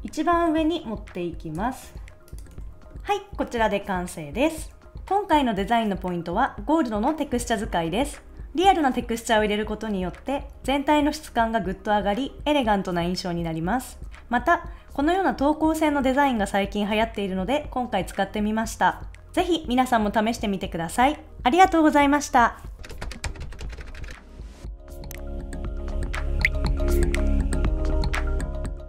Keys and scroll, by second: 2.5 super+s.